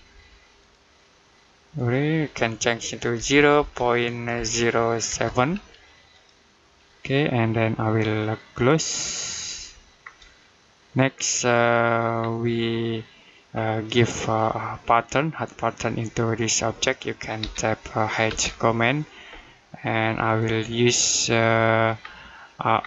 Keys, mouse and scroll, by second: 0.4 click, 3.0 typing, 5.7-6.4 typing, 6.0 click, 9.4 Escape, 9.8-11.3 scroll down 1, 11.5 middle click, 12.0-12.4 scroll down 1, 12.4 middle click, 13.3-14.0 scroll up 1, 14.0 middle click, 17.2 h, 18.1 space, 20.1 click, 21.8 scroll down 1.